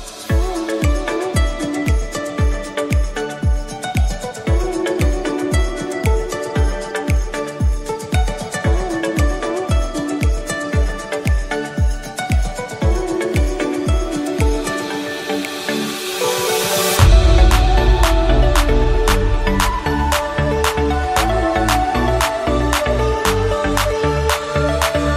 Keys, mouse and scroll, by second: 4.4-5.9 drag, 5.9 Tab, 6.3-8.4 right drag, 8.4 middle click, 9.0 click, 9.5-10.0 scroll down 4, 10.0-13.5 middle drag, 13.5 KP_7, 14.1 KP_1, 15.3-15.9 shift+middle drag, 15.9-17.3 scroll up 1, 17.3 shift+a, 19.9-22.8 scroll down 1, 23.5 click.